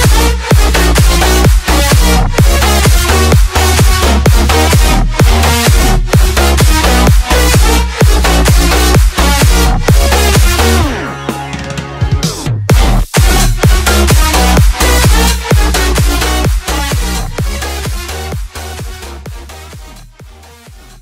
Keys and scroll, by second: 11.9 ctrl+shift+], 14.0 space.